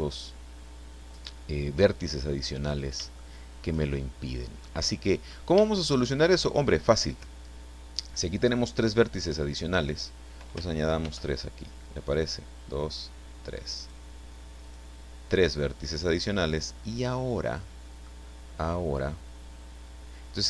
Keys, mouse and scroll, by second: 2.6 scroll down 2, 3.6 shift+middle click, 3.8-4.6 shift+scroll up 3, 4.6 middle click, 5.6 shift+middle click, 11.0 ctrl+r, 12.3 scroll up 2, 13.1 scroll up 2, 13.7 click, 14.6 click, 15.6-18.2 middle drag.